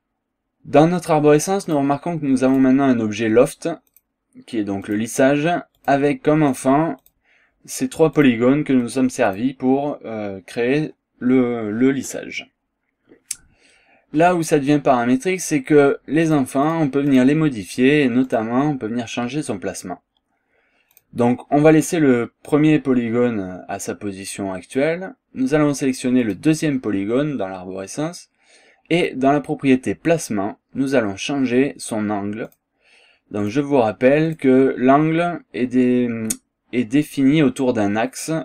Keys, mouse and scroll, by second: 1.7 click, 2.5 click, 3.9 click, 4.9 click, 5.8 click, 6.5 click, 7.0 click, 8.2 click, 8.9 click, 9.3 click, 16.3 click, 16.7 click, 17.1 click, 18.3 click, 20.9 click, 26.2 click, 29.0 click, 32.5 click, 33.4 click, 34.3 click.